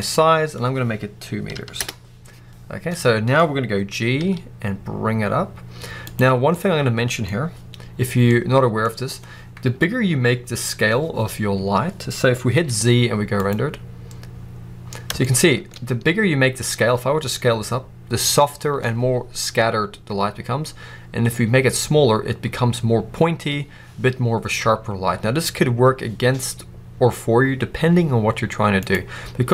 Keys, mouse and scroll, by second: 1.7 Return, 2.6 scroll down 1, 2.8-7.3 middle drag, 4.0 g, 6.0 click, 7.2 scroll up 2, 8.2-14.5 middle drag, 12.5 z, 15.3 shift+middle click, 16.7 s, 28.8-29.5 right drag.